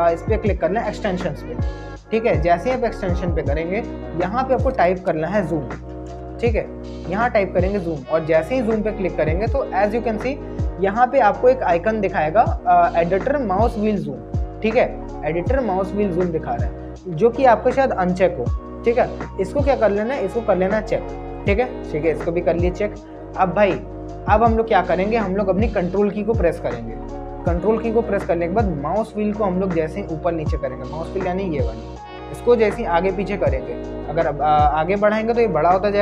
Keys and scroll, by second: 5.4-6.5 typing.